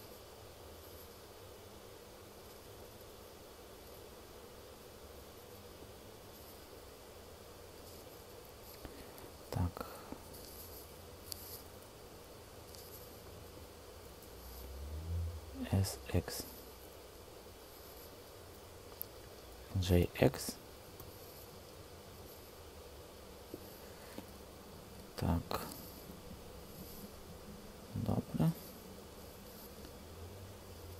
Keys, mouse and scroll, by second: 15.5 s, 16.0 x, 17.8 Escape, 19.7 g, 19.9 x, 20.9 x.